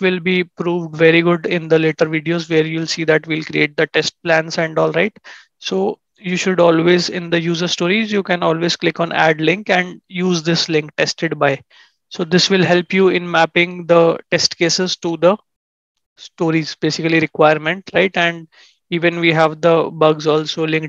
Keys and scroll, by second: 5.1 ctrl+shift+#, 14.7 ctrl+shift+&.